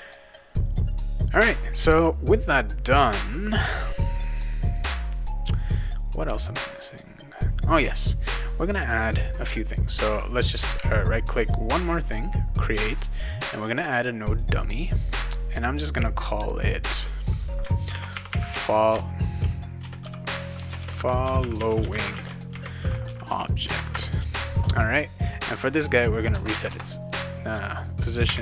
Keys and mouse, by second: 7.6 click, 8.6 click, 9.1 click, 10.1 click, 11.4 right click, 14.3 click, 15.5 click, 16.6 click, 17.6-23.8 typing, 19.8 Caps_Lock, 23.9 Return, 25.3 click, 25.5 click, 26.5 Tab, 28.2 Tab.